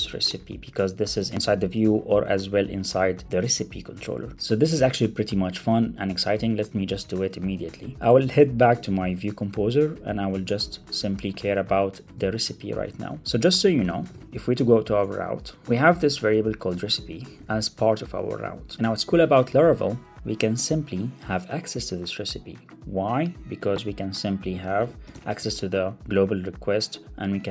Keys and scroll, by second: 7.9 ctrl+Tab, 8.5 ctrl+Tab, 12.6 Return, 13.2 Return, 13.2 Up, 13.5 shift+super+o, 14.9 Return, 17.2 super+c, 18.7 ctrl+Tab.